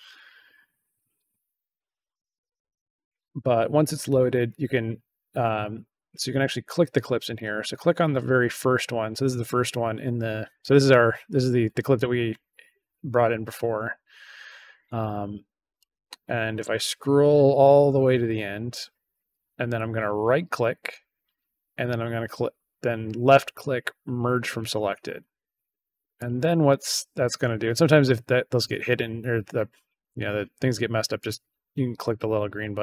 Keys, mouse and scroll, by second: 5.4 click, 6.3-7.3 drag, 15.7-18.7 drag, 20.0 right click, 24.2 click, 26.1 click, 26.3 click, 27.8 click, 31.1 click, 32.0 click, 32.2 click.